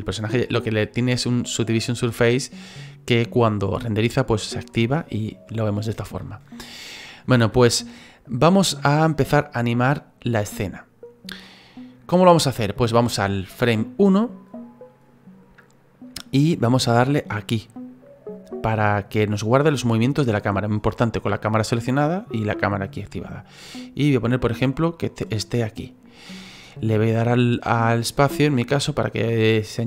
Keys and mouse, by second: 6.5 click, 8.3 click, 13.5 click, 14.4 click, 15.6 click, 17.7 click, 23.1 middle click, 28.2 space.